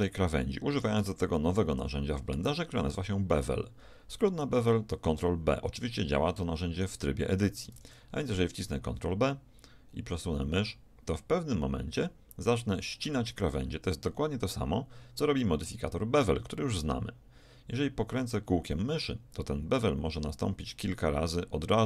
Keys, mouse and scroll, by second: 7.7 ctrl+b.